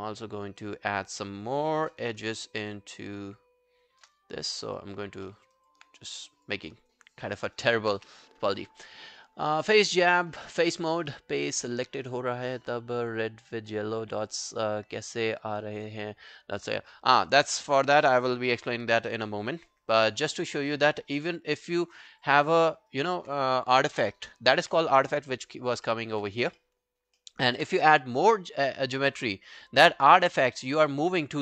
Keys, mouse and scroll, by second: 2.3 shift+right click, 5.3 alt+middle click, 5.6 alt+click, 6.7 alt+click, 7.4 alt+middle click, 7.6 alt+right click, 8.0 w, 21.8 alt+middle click, 22.0 alt+right click, 22.3 alt+click, 22.7 alt+middle click, 22.9 alt+right click, 23.9 alt+middle click, 24.2 alt+right click, 25.9 alt+middle click, 26.6 alt+middle click, 27.0 alt+scroll down 1, 27.2 alt+middle click, 27.5 alt+right click.